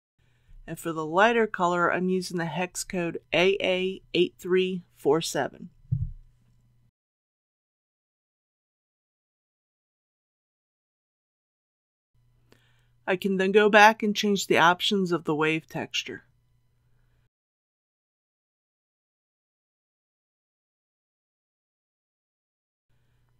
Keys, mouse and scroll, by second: 0.6 click, 5.3-6.5 typing, 16.9 click, 17.7 KP_2, 17.9 KP_Decimal, 18.1 KP_5.